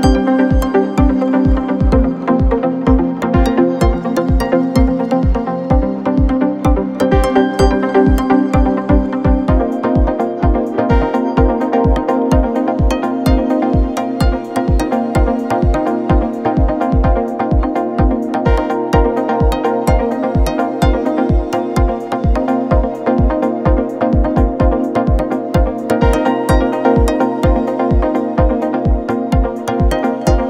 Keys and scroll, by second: 4.4 ctrl+a, 5.1 Up, 5.3 Up, 5.5 Up, 5.6 Up, 8.2 Up, 8.3 Up, 8.5 Up, 8.6 Up, 8.8 Up, 10.1 Up, 11.3 alt+Up, 11.5 alt+Up, 12.2 Up, 12.3 Up, 12.5 Up, 16.1 typing, 16.6 Up, 17.8 ctrl+z, 20.5 v, 23.8 Down, 23.9 Down, 24.1 Down.